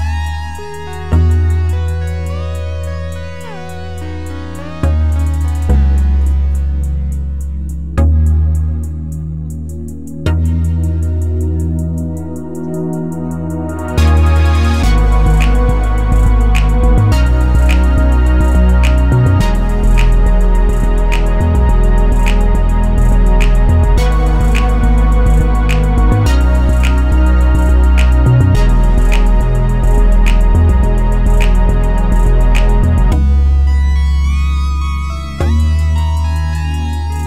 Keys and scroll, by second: 5.4 ctrl+z, 29.9-31.3 typing.